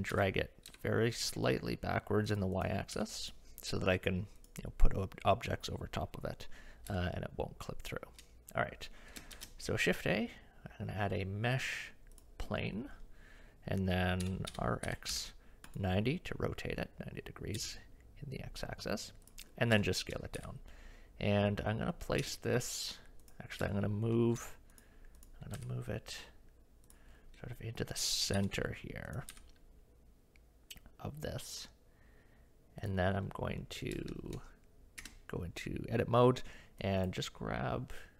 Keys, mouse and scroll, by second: 0.1 g, 2.9 KP_1, 3.2 click, 4.4 click, 7.0 shift+middle drag, 9.3 shift+a, 14.2 r, 17.6 s, 19.8 shift+middle drag, 20.4 g, 23.3 click, 23.8 shift+middle click, 24.2 shift+middle drag, 25.6 g, 28.4 s, 29.3 g, 34.3-35.0 shift+middle drag, 35.0 Tab, 36.9 click.